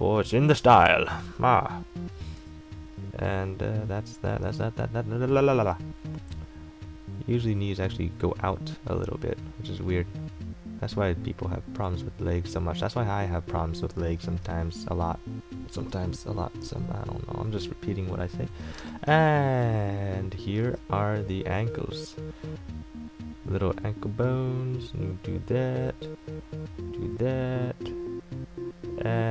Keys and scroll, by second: 1.4 e, 2.5 a, 14.6 e, 16.0 a, 18.9 space, 20.8 ctrl+z.